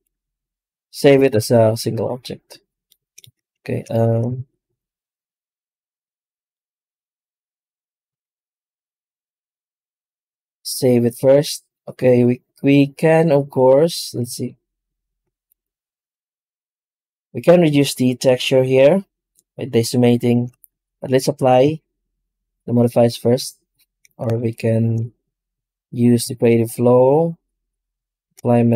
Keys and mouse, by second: 1.2 KP_0.